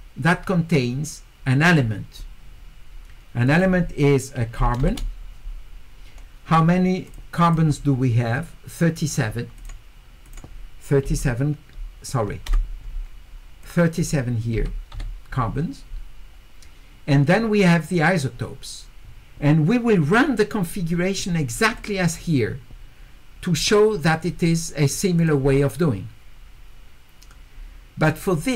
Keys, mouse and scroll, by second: 3.5 click, 7.1 click, 7.5 click, 9.6 click, 10.2 click, 13.6 click, 21.8 click, 25.2 click.